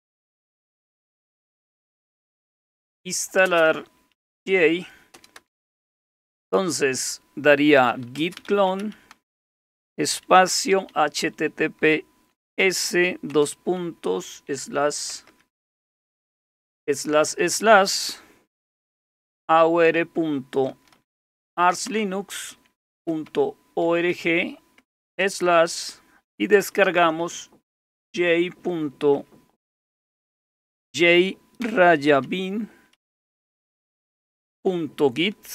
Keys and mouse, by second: 0.2-16.4 typing, 18.3-24.1 typing, 25.2 typing, 26.5-32.9 typing, 34.5 typing.